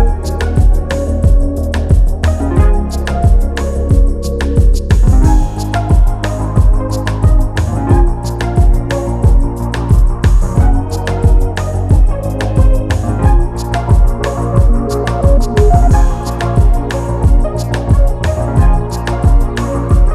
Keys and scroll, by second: 1.6-5.2 typing, 3.1 Return, 11.6 ctrl+z, 17.8 4, 18.5 3, 19.1 ].